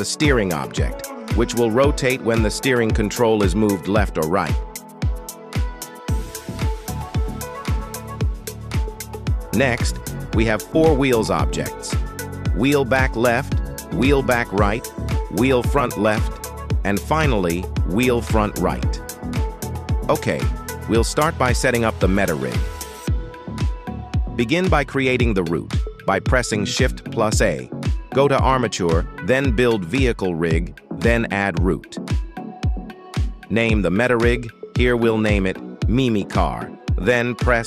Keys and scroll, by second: 0.5 Escape, 1.7 g, 2.3 Escape, 16.3 g, 16.6 Escape, 18.1 g, 18.6 Escape, 23.3 shift+a, 26.8 shift+a, 34.8 i, 35.0 m, 36.0 c, 36.4 Return.